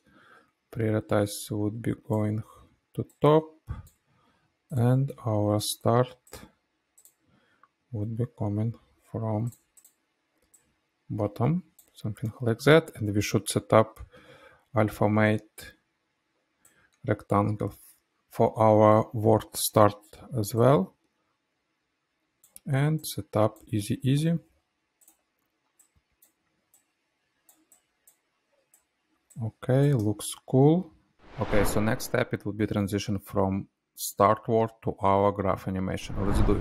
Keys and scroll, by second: 5.1 p, 25.1 F9, 28.9 space.